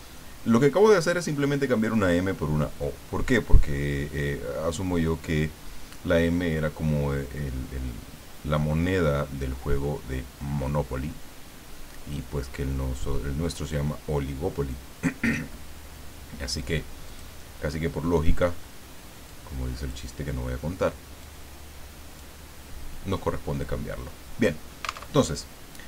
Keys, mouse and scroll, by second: 17.0 click, 18.5-18.9 scroll up 1, 19.3 click, 21.2-22.4 drag, 25.1 alt+Tab.